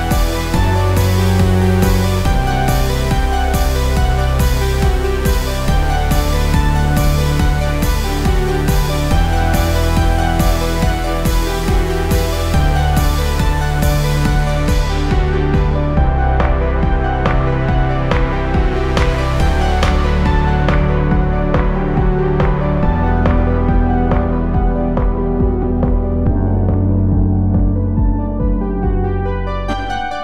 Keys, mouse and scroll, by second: 0.0-3.2 typing, 4.4 Return, 8.7 ctrl+Return, 9.0 ctrl+j, 13.5 click, 14.7-17.7 typing, 17.8 Return, 23.7 click, 27.1 click, 27.8 click.